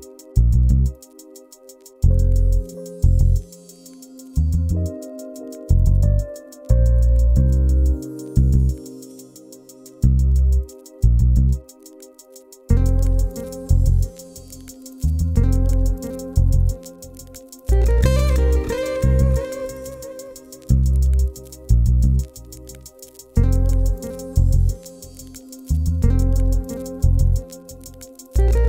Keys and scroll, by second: 0.1 0, 8.6 0.